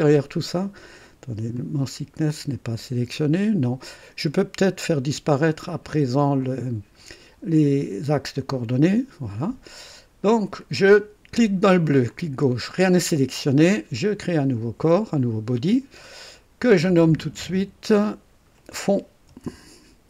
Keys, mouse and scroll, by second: 1.5 click, 6.4 click, 8.0 click, 12.0 click, 14.0 click, 16.6 click, 17.8 F2, 19.0-20.0 typing.